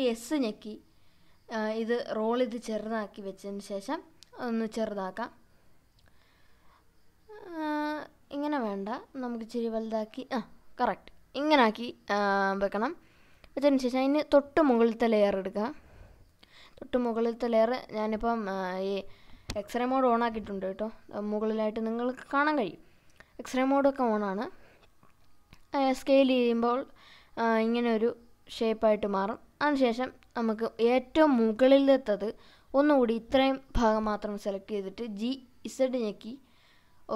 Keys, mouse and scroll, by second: 0.7 s, 1.2-1.7 scroll up 2, 1.7 scroll down 1, 2.0-3.1 scroll up 5, 4.7 scroll up 1, 12.6 click, 15.2-18.3 drag, 19.6 s, 22.7 right click, 24.0 s, 24.4-25.2 scroll up 3, 26.7-27.6 scroll up 2, 28.9 click, 29.6-32.5 drag, 33.9 g, 34.4 z, 36.9 right click.